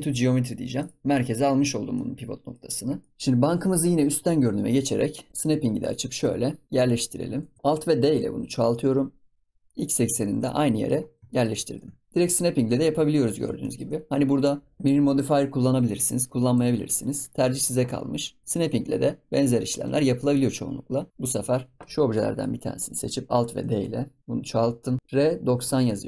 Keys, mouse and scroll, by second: 1.0 scroll up 8, 1.1-1.6 middle drag, 1.6-1.9 scroll down 2, 1.9-2.6 middle drag, 2.6-3.0 scroll up 6, 3.0 middle click, 3.1 ctrl+s, 4.0 KP_7, 5.7 click, 7.6-8.2 shift+middle drag, 8.2 alt+d, 10.2 ctrl+s, 10.4-10.9 middle drag, 10.9 scroll up 4, 11.3 shift+middle click, 12.1 shift+click, 12.1 KP_7, 13.0 ctrl+s, 13.3 scroll down 1, 13.6-15.7 shift+middle drag, 19.3 click, 21.0 click, 21.1 KP_7, 22.3 click, 23.5 alt+d.